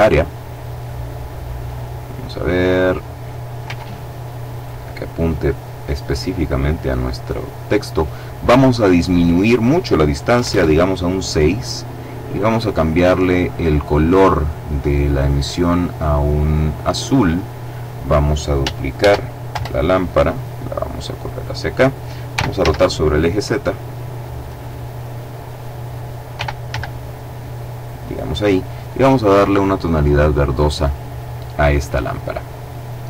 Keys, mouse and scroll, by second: 0.4-2.8 middle drag, 3.0 r, 3.9 click, 4.2 middle click, 5.6 middle click, 8.4 click, 9.7 KP_6, 9.9 KP_Enter, 11.7 click, 14.2 click, 17.4-17.9 scroll down 1, 18.3 shift+d, 18.9 shift+Return, 19.7-21.4 drag, 21.7 r, 21.9 z, 23.8 click, 25.7 r, 26.1 z, 27.4 click, 28.2 click, 30.1 click, 31.9-32.3 scroll down 1, 32.3-32.8 scroll up 2.